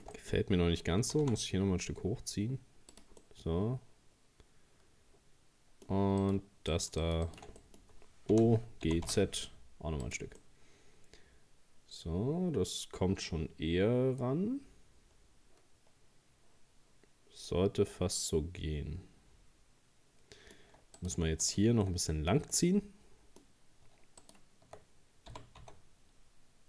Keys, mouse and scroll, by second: 0.2 middle click, 1.0 g, 3.2-6.2 middle drag, 6.2 right click, 6.7 shift+right click, 7.0 shift+right click, 7.3 shift+right click, 7.6 middle click, 8.3 o, 8.9 g, 10.4 scroll up 1, 10.4-13.6 middle drag, 21.0 right click, 21.4 shift+right click, 21.9-24.2 shift+middle drag, 24.2 shift+right click, 25.3 g.